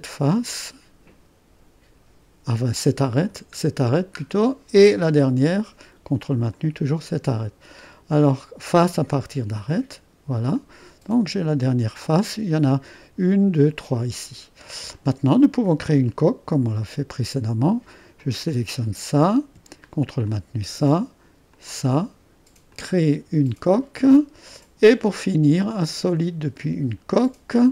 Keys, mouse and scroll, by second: 3.1 click, 3.9-5.1 middle drag, 3.9-4.5 scroll down 1, 4.7 click, 6.6-10.8 drag, 10.8 middle click, 11.1 click, 11.2 middle click, 11.7-13.7 drag, 16.1 click, 21.8 click, 22.8 click, 27.2 middle click, 27.4 click.